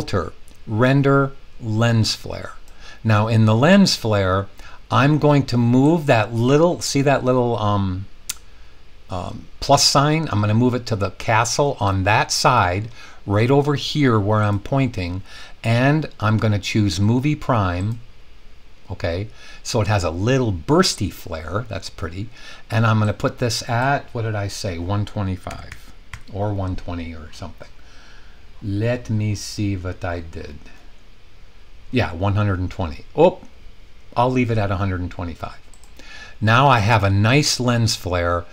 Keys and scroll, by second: 25.3-26.6 typing.